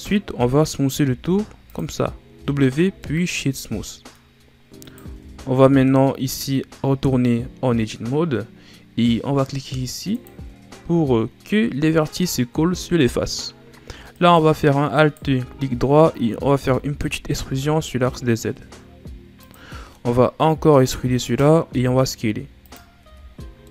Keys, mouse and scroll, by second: 1.0 w, 2.3 a, 3.0-4.3 middle drag, 4.3-4.8 scroll up 1, 4.8 right click, 5.1 Tab, 5.6-8.5 middle drag, 10.1 click, 14.1 alt+right click, 14.9 alt+right click, 16.5 e, 19.7-20.8 middle drag, 20.8 e, 21.7 s, 23.0 Tab, 23.4-23.7 scroll down 2.